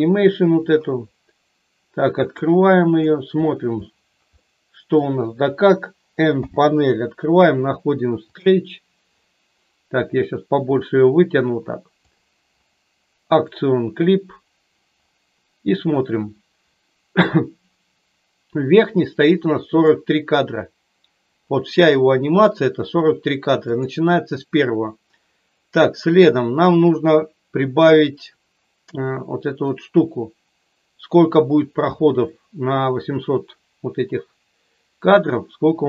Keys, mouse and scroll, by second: 2.2 click, 4.6 middle click, 6.3 n, 10.8-12.1 drag, 13.3 click, 19.7-23.7 drag, 29.6-35.1 drag.